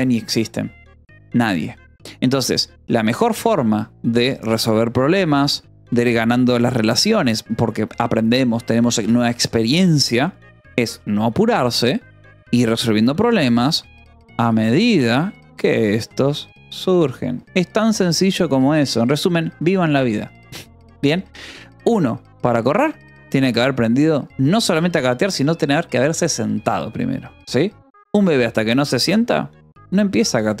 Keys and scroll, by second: 2.9 k, 3.6 shift+v, 5.0 Escape, 5.2 k, 6.2 shift+v, 9.7 Escape, 10.5 j, 11.3 shift+v, 12.0 Escape, 12.3-17.1 typing, 18.5 ctrl+s.